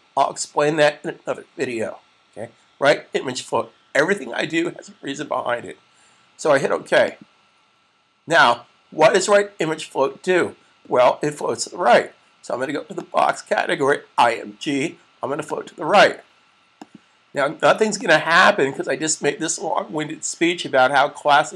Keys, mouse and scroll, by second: 7.2 click, 12.9 click.